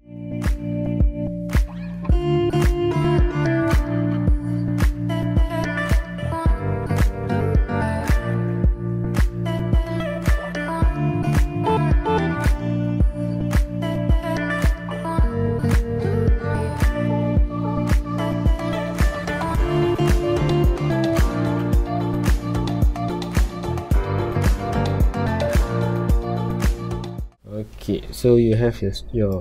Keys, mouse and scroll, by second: 0.0 scroll down 1, 0.2 middle click, 0.7 scroll up 1, 0.8 a, 1.9 m, 2.6 scroll up 1, 2.9 a, 3.0 scroll down 1, 3.3-4.1 right drag, 4.1 scroll down 1, 4.2 shift+middle drag, 4.4 scroll up 1, 4.8 click, 5.0 x, 5.4 click, 5.7 KP_1, 5.9-6.5 scroll up 3, 6.0 shift+middle click, 6.6-7.3 middle drag, 7.3 alt+r, 7.6-10.3 typing, 7.9 scroll up 1, 8.8 click, 9.1 shift+middle click, 10.1 click, 11.5 r, 12.8 click, 13.0 KP_3, 13.6 r, 13.8 click, 14.1 KP_7, 14.4 shift+middle click, 14.6 r, 15.4 click, 15.4-16.4 middle drag, 16.8 middle drag, 17.1 scroll up 2, 17.2 middle drag, 17.4-19.1 right drag, 19.1 ctrl+a, 19.7 alt+g, 19.8 KP_Decimal, 20.3 scroll up 1, 20.5 scroll down 1, 20.9 s, 21.3 click, 21.6 scroll up 1, 21.9 shift+middle click, 22.2 scroll up 1, 22.4 g, 22.7 click, 23.0 middle click, 23.2 g, 24.0 ctrl+click, 24.2 middle click, 24.5 KP_7, 24.8 g, 25.1-25.7 middle drag, 25.7 s, 26.2 click, 26.4 g, 27.0-29.4 middle drag.